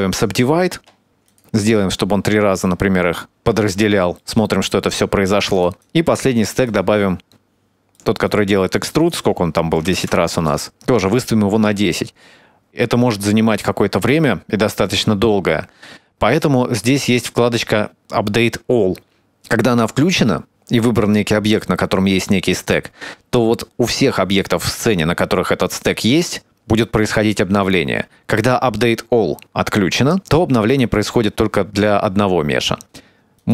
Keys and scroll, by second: 3.9 Tab, 4.6 Tab.